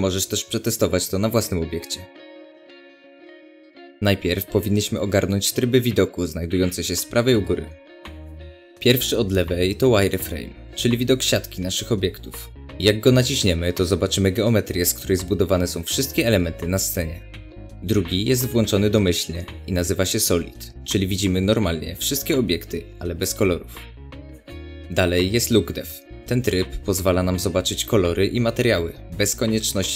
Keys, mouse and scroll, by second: 2.3-2.6 scroll up 2, 10.1 click, 12.1-17.7 middle drag, 17.7 click, 27.0 click, 27.6-29.9 middle drag, 27.6-28.0 scroll up 2.